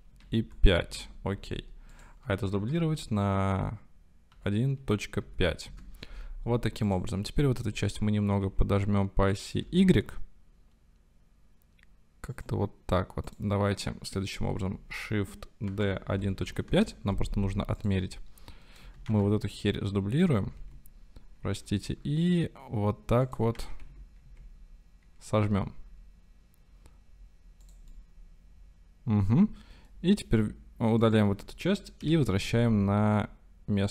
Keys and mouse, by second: 0.1 KP_Decimal, 0.4 KP_5, 0.9 KP_Enter, 1.9 click, 2.6 shift+d, 4.3 KP_1, 4.8 KP_Decimal, 5.2 KP_5, 5.8 KP_Enter, 7.9 s, 8.6 x, 9.6 y, 12.4 click, 15.7 shift+d, 16.1 KP_1, 16.3 KP_Decimal, 16.5 KP_5, 16.7 KP_Enter, 17.9 click, 19.1 shift+d, 20.5 g, 20.7 x, 21.6 y, 23.3 click, 23.6 s, 23.9 x, 24.2 z, 25.4 y, 27.7 click, 27.9-30.0 drag, 32.0 Delete.